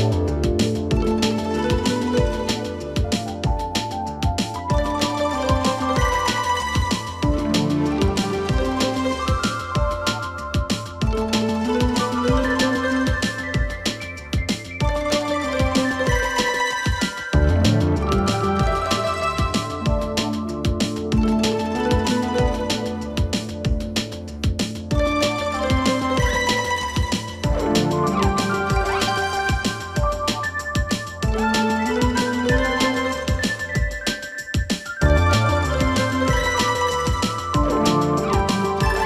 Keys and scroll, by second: 34.9 ctrl+z.